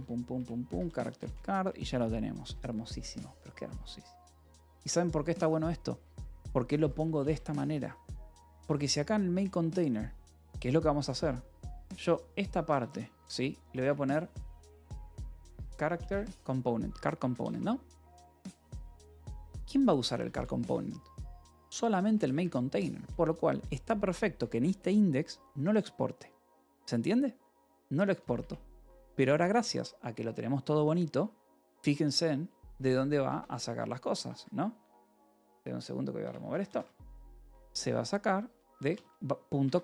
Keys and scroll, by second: 0.2 Return, 0.6 Escape, 1.2 ;, 2.2-4.1 typing, 6.5 j, 7.4 Escape, 8.3 j, 9.2 Return, 10.1-15.5 typing, 16.6 shift+c, 16.8 Return, 17.1 Escape, 18.1 ctrl+s, 18.2-21.5 typing, 22.4 Escape, 23.1 shift+;, 24.1 k, 24.6 Return, 27.4 :, 27.8 j, 28.3 Return, 29.0 k, 30.2 l, 30.7 k, 32.4-34.2 typing, 35.3 a, 36.1 Return, 36.4 Escape, 37.1 j, 38.2-39.8 typing, 39.6 Escape.